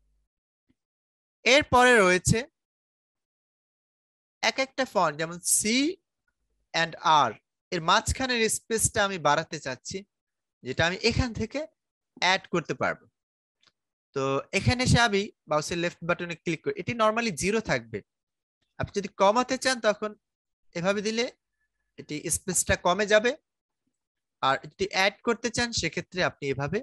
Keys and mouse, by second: 15.0 click, 20.1 click, 23.7 click.